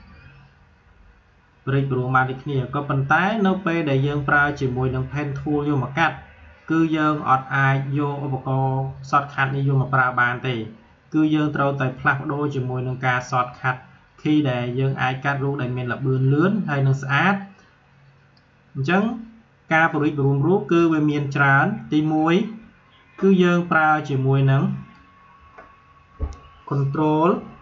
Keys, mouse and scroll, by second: 13.5-24.0 drag, 24.0-27.6 drag.